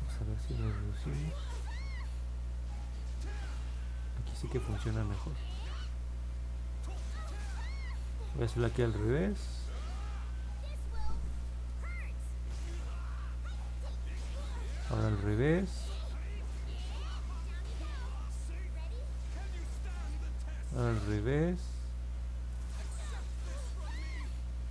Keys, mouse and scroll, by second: 1.9 click, 2.3 click, 2.8 click, 3.4 click, 4.0 click, 4.5 click, 5.4 click, 7.4 click, 8.5 click, 9.3 click, 10.1 click, 10.5 click, 10.9 click, 12.5 click, 13.0 click, 13.6 click, 14.8 click, 15.4 click, 15.9 click, 16.5 click, 17.0 click, 17.6 click, 18.1 click, 18.6 click, 19.1 click, 19.6 click, 20.8 click, 21.3 click, 21.8 click, 22.4 click, 22.9 click, 23.6 click, 24.1 click.